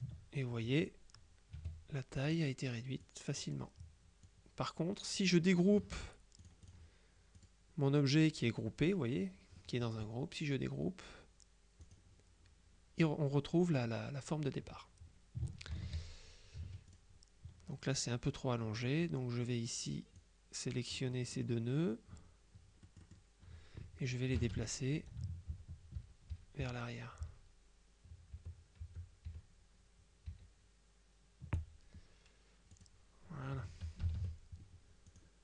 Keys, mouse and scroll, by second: 1.7 F2, 2.4 click, 3.1 click, 4.4 click, 6.5-7.3 drag, 7.4 click, 11.9 click, 15.8 ctrl+z, 16.7 F2, 17.0 click, 18.9 click, 20.2-22.0 drag, 21.2 right click, 22.9 click, 24.4 KP_Subtract, 25.6 shift+Right, 28.4 Right, 29.4 Right, 30.4 Right, 32.8 click, 33.6 F1, 34.1 KP_Subtract, 35.2 click.